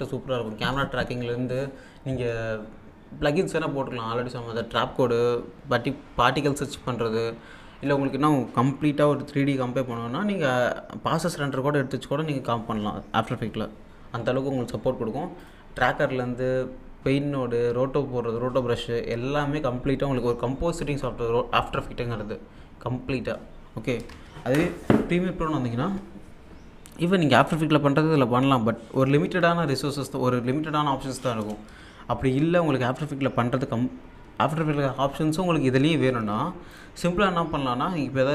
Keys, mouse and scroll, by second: 3.1-3.9 scroll down 1, 15.4 click, 24.0 alt+Num_Lock, 24.0 click, 24.1 alt+Tab, 25.9-26.3 scroll up 1, 31.7 alt+Num_Lock, 31.7-32.3 scroll up 3, 32.3-32.6 alt+scroll up 1, 36.7 click.